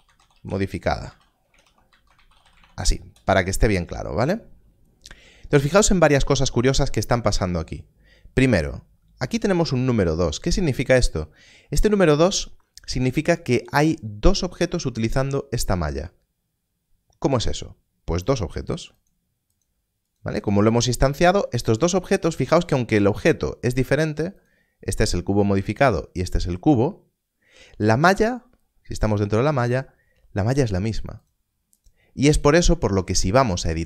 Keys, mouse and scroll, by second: 0.0-2.6 typing, 3.0 Return, 18.2 Return, 20.7 click, 24.3 click, 31.2 click, 32.6 Tab, 33.5 click.